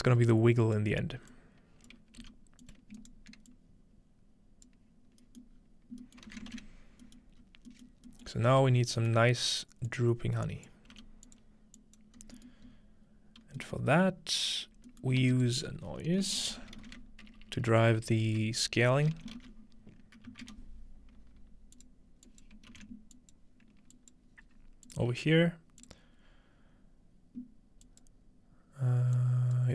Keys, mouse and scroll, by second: 0.3 alt+right click, 1.3-6.1 alt+drag, 1.9 alt+right click, 2.2 g, 3.1-4.6 right drag, 4.7 right click, 5.2-5.6 scroll up 2, 5.6-7.1 middle drag, 6.3 alt+a, 6.5 ctrl+s, 7.3 middle click, 7.4-8.8 scroll up 1, 7.8 middle click, 8.0 typing, 8.8 scroll down 1, 8.9 scroll up 1, 9.2 scroll down 1, 9.3 scroll up 1, 9.4-9.9 scroll down 1, 9.9-10.8 drag, 11.0 g, 11.3-12.0 drag, 12.2-13.5 scroll up 3, 13.5 scroll down 2, 14.1 scroll up 2, 15.1 shift+middle click, 15.2 typing, 15.3 shift+click, 16.3-21.0 typing, 21.8-23.4 drag, 22.7 typing, 24.0 ctrl+click, 24.9 click, 25.8 click, 27.9 click, 29.2 click.